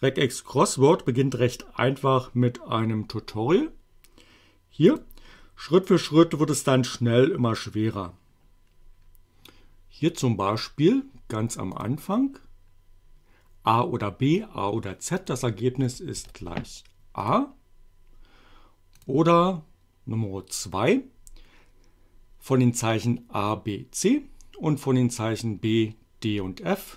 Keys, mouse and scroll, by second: 4.9 click, 11.8 click, 15.1 click, 16.2 shift+a, 17.3 click, 19.0 click.